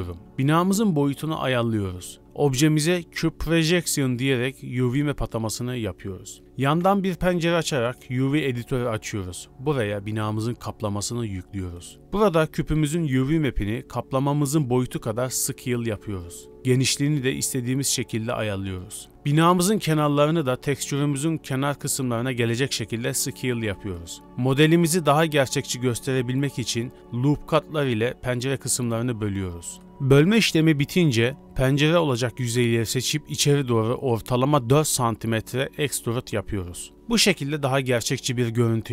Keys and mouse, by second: 2.2 a, 2.2 u, 3.5 shift+click, 5.8 click, 6.4 click, 7.8-9.1 drag, 12.8 click, 15.2 click, 15.3 z, 15.3 a, 15.3 s, 16.5 s, 18.4 click, 18.8 g, 19.2 click, 20.4 click, 21.1 3, 23.1 middle click, 23.8 a, 24.3 middle click, 25.0 g, 27.0 ctrl+r, 27.9 ctrl+r, 29.9 b, 30.0 b, 30.9 b, 32.4 KP_1, 32.9 KP_3, 33.2 alt+z, 33.7 alt+e, 35.0 click, 35.4-36.7 drag, 38.8 click.